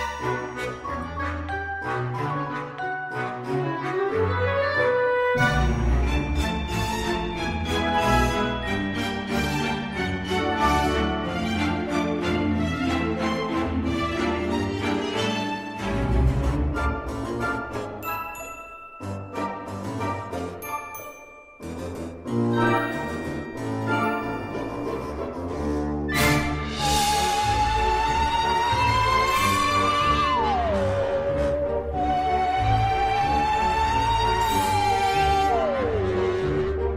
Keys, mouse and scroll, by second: 0.6 b, 0.9 click, 1.2 g, 1.5 click, 1.9 click, 2.1 click, 2.3-7.7 typing, 2.8 click, 2.9 click, 3.2 click, 3.3 click, 4.0 click, 4.4 click, 4.9 click, 4.9 click, 5.3 click, 5.5 click, 5.8 click, 6.0 click, 6.3 click, 6.5-6.9 scroll down 4, 6.9 click, 7.1 middle click, 7.4 click, 7.6 click, 8.1 click, 8.7 click, 9.0 click, 9.1 click, 9.4 click, 9.6 click, 9.7 click, 9.8 click, 10.0 click, 10.4 g, 10.8 click, 10.9 ctrl+r, 11.1 scroll, 11.3 click, 11.5 click, 11.6 click, 11.8 scroll, 12.0 click, 12.3 click, 12.6 click, 12.8 click, 12.9 click, 13.2 ctrl+r, 13.3 scroll up 20, 13.5 click, 13.6 click, 14.1 click, 14.3-17.4 typing, 14.7 click, 15.3 click, 15.7 click, 15.8 click, 16.2 click, 16.5 click, 16.9 click, 17.2 click, 17.4 click, 18.0 click, 18.1-18.8 shift+scroll, 18.2 shift+middle click, 18.3 click, 18.4 click, 18.6-30.9 typing, 18.8 click, 19.0 click, 19.3 click, 19.4 click, 19.7 click, 19.7 scroll, 19.9 click, 20.2 click, 20.3 click, 20.3 middle click, 20.7 click, 20.9 click, 21.4 middle click, 21.6 click, 21.9 click, 22.1 click, 22.4 click, 22.6 click, 22.9 click, 23.1 click, 23.4 click, 23.4 middle click, 23.7 click, 24.0 click, 24.2 click, 24.4 click, 24.6 click, 24.9 click, 25.0 click, 25.3 click, 25.5 click, 25.6 click, 26.0 click, 26.1 click, 26.7 click, 27.1 click, 27.4 click, 27.6 click, 27.9 click, 28.0 click, 28.3 click, 28.4 click, 28.8 click, 29.1 click, 29.4 click, 29.5 click, 29.7 scroll, 30.1 middle click, 30.4 click, 30.7 click, 30.8 click, 31.2 click, 31.4 shift+middle click, 31.5 shift+middle click, 31.5-31.8 shift+scroll up 6, 31.7 shift+middle click, 32.1 click, 32.2 g, 32.6 click, 32.9 scroll, 33.4-33.7 scroll, 33.6 click, 33.7 g, 34.5 click, 34.8 click, 34.9 g, 35.2 middle click, 35.7 click, 35.9 g, 36.1 click, 36.4 click, 36.4 g, 36.5 click, 36.7 click.